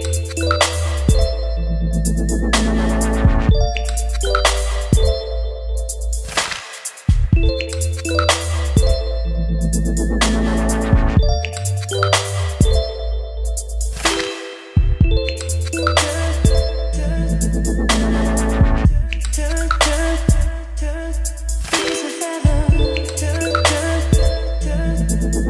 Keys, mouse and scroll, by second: 2.4-5.8 drag, 7.3-25.4 drag.